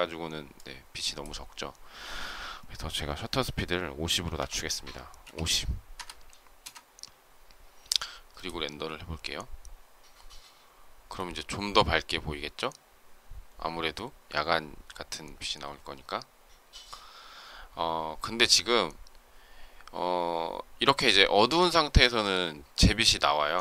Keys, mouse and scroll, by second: 5.1 BackSpace, 6.4 Return.